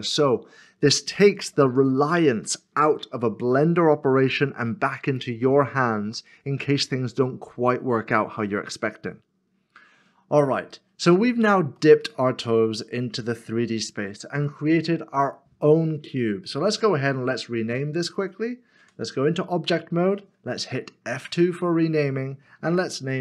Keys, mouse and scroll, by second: 9.4 middle click, 11.8 shift+middle click, 16.0 scroll up 1, 16.0 middle click, 18.8 Tab, 21.1 Tab.